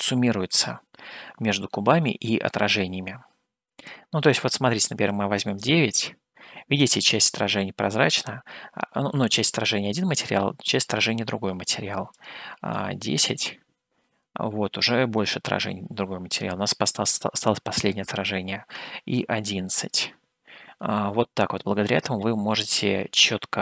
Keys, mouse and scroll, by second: 3.8-6.6 drag, 12.1-14.6 drag, 17.6-19.6 drag, 19.0 KP_1.